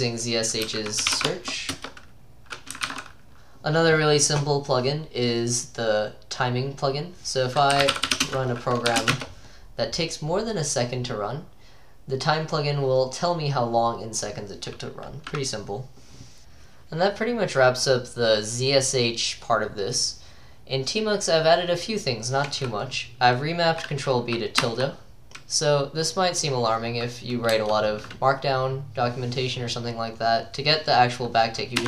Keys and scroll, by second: 0.0-3.8 typing, 1.8 Return, 7.5-9.1 typing, 9.2 Return, 27.6 BackSpace.